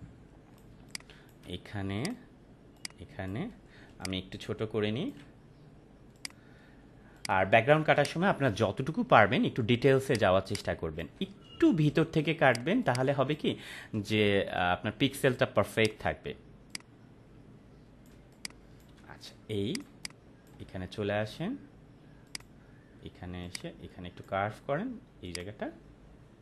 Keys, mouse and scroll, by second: 0.7 space, 0.9 click, 1.1-1.5 space, 2.0 click, 3.7 space, 4.3-5.2 ctrl+click, 7.5 click, 7.7-8.5 space, 8.3 space, 10.0 click, 10.3 space, 10.4-11.1 click, 10.7 space, 12.4 click, 12.7 space, 12.8-13.4 click, 13.2 space, 15.7-18.2 drag, 18.1 space, 18.3 click, 18.6-18.9 space, 19.7 click, 19.8 space, 20.0 click, 20.3-20.6 space, 22.3-24.3 drag.